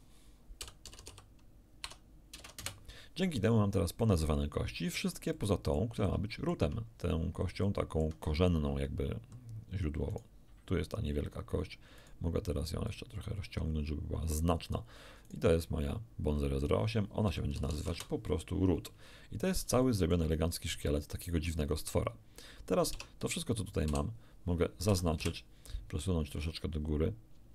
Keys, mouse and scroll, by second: 0.6-2.6 typing, 2.6 Return, 4.0-5.9 drag, 6.1 shift+middle click, 6.9 shift+scroll up 1, 7.6 shift+middle click, 10.1 right click, 12.0 right click, 12.9-14.9 drag, 15.3 right click, 16.3 click, 16.6 click, 17.3 r, 17.5 o, 17.7 o, 17.7 t, 17.9 Return, 19.4-19.7 scroll down 1, 19.8-22.0 shift+middle drag, 22.9 Tab, 24.3 a, 24.9 a, 25.2 1.